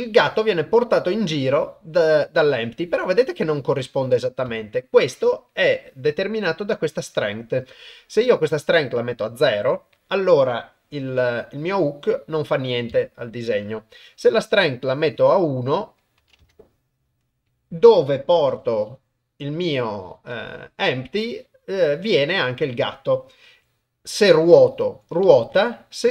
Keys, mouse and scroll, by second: 8.6 click, 11.1 g, 14.8 click, 16.2 click, 18.5 g, 23.5 r, 25.5 s.